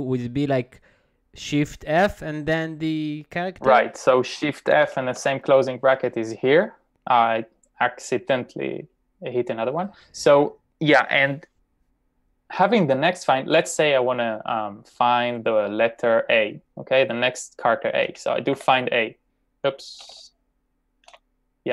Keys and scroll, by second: 4.6-5.7 typing, 17.8-21.5 typing.